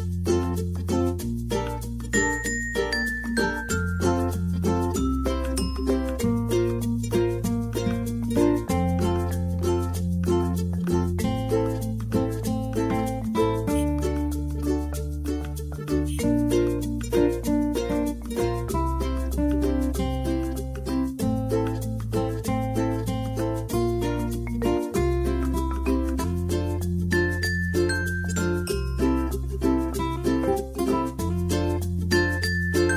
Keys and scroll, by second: 4.5 typing, 5.6-6.5 typing, 7.6 typing, 31.7-32.9 typing.